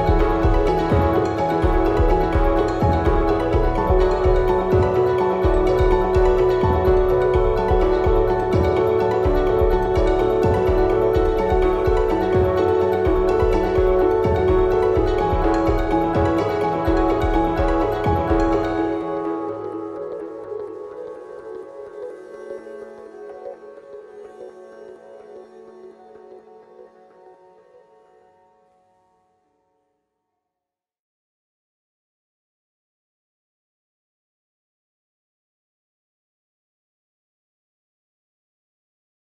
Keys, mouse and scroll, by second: 2.7 g, 5.7 KP_0, 6.3 click, 7.0 KP_7, 7.8-9.1 middle drag, 7.8-8.3 scroll down 2, 9.1 click, 9.6 ctrl+r, 15.9 click, 16.8 ctrl+r, 18.7 click, 20.8 ctrl+r, 25.0-28.3 middle drag, 28.3 click, 29.1 ctrl+r, 33.3 KP_0, 34.1 scroll down 1, 34.2 click, 34.9 scroll up 1, 37.7-39.3 drag, 37.7 a.